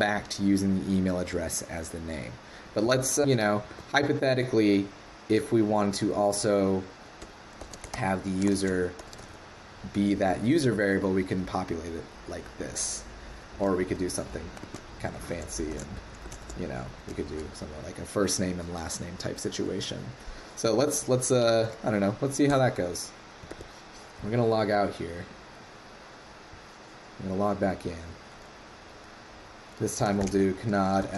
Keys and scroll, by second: 3.7 super+Tab, 21.5 ctrl+c, 23.5 super+Tab.